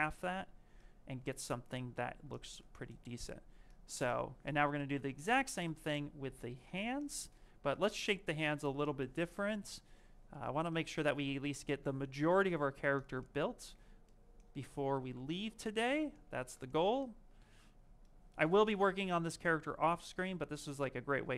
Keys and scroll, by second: 11.4 s, 13.0 ctrl+shift+z, 16.1 ctrl+z.